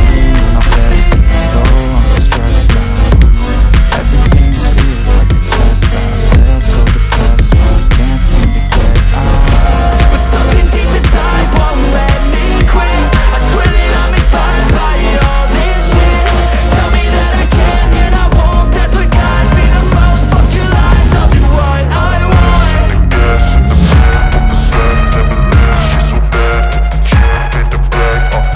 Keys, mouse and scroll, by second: 0.2 click, 0.9 ctrl+t, 1.7 alt+click, 2.7 ctrl+z, 3.7 ctrl+click, 10.4 ctrl+z, 11.5 alt+click, 16.2 ctrl+click, 20.4 ctrl+click, 25.0 ctrl+e, 26.4 ctrl+z, 27.7 click.